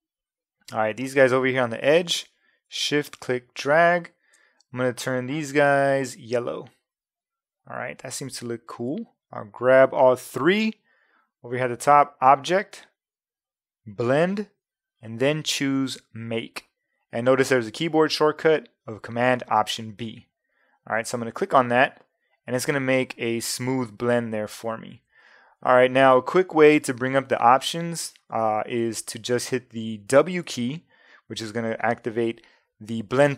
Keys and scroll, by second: 30.5 w.